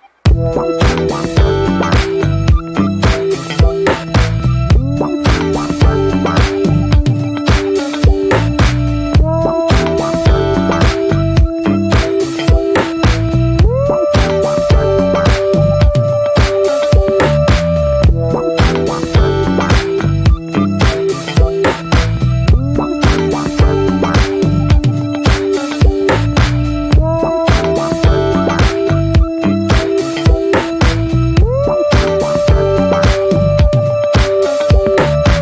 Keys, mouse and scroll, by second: 0.0 click, 0.4 middle click, 0.9 click, 1.4 middle click, 1.9 click, 2.4 middle click, 2.8 shift+click, 3.3 ctrl+z, 3.5 ctrl+z, 3.9 shift+middle click, 4.4 click, 5.0 middle click, 5.5 click, 6.1 middle click, 6.4 click, 6.8 middle click, 7.2 click, 7.7 ctrl+z, 7.9 click, 8.3 middle click, 8.8 shift+click, 9.0 scroll down 1, 9.1-10.4 shift+middle drag, 10.4 click, 10.7 shift+middle click, 11.1 click, 11.4 middle click, 11.8 click, 12.2 middle click, 12.5 click, 12.9 middle click, 13.4 shift+click, 13.8 middle click, 14.0 click, 14.3 middle click, 14.5 shift+click, 14.8 middle click, 15.1-16.1 drag, 16.1 middle click, 16.4 click, 16.7 middle click, 17.1 click, 17.2 scroll down 1, 17.3 shift+middle click, 17.5 scroll up 1, 17.8 click, 18.1 middle click, 18.5 click, 19.0 middle click, 19.5 click, 20.1 ctrl+z, 20.2 shift+middle click, 20.6 scroll up 1, 20.8 click, 21.2 middle click, 21.7 shift+click, 22.0 middle click, 22.2 scroll up 1, 22.3 shift+middle click, 22.7-23.7 drag, 23.7 middle click, 23.8 scroll up 1, 24.0-25.3 drag, 25.3 shift+middle click, 25.7 click, 26.7 middle click, 26.9 click, 27.7 middle click, 28.1-29.4 drag, 29.4 scroll down 1, 29.5 shift+middle click, 29.8-30.3 scroll up 2, 29.9 middle click, 30.3-32.6 drag, 32.6 scroll down 1, 32.7 middle click, 32.8 scroll up 2, 32.9 shift+middle click, 33.1 middle click, 33.4-34.6 drag, 34.6 middle click, 35.2 click.